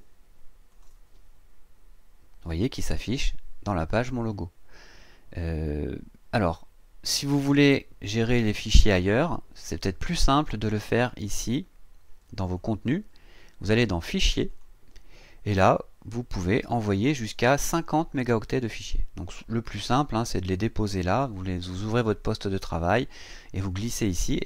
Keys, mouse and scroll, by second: 0.7 click, 6.2 scroll down 2, 9.4 scroll up 2, 10.6 click, 12.5 click, 14.5 click.